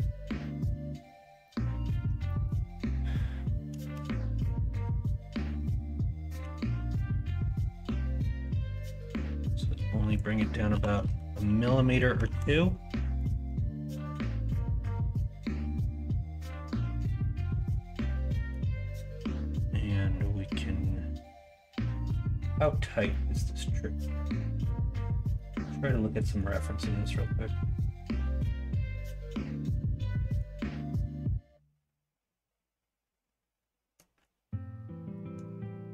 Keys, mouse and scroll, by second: 0.4 middle click, 1.4-1.8 middle drag, 2.2 middle click, 4.0 shift+d, 4.7 Tab, 6.4 l, 6.9 l, 10.0 click, 10.7 KP_1, 11.0 KP_3, 12.2 alt+z, 15.7 middle click, 17.2-18.5 scroll up 1, 18.5 scroll down 1.